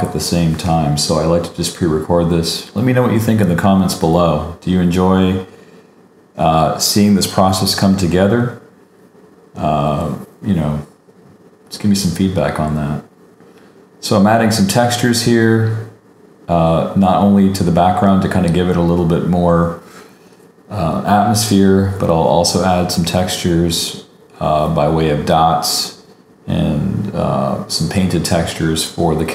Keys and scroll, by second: 1.4 super+z, 10.1 super+-, 10.4 super+t, 12.1 super+=, 17.6 super+=, 19.6 super+-, 19.6 super+=, 26.3 super+x, 26.5 super+d, 27.7 super+x, 29.1 super+x.